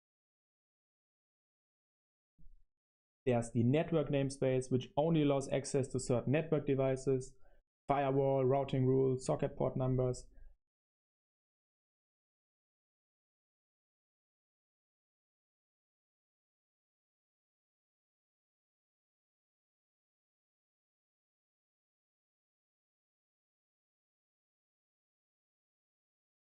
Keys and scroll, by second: 0.0-2.1 typing, 1.7 super+1, 10.4 space, 11.0 super+7, 11.5-19.8 typing, 19.5 super+1, 19.8 super+1, 21.4 super+7, 22.0-25.2 typing.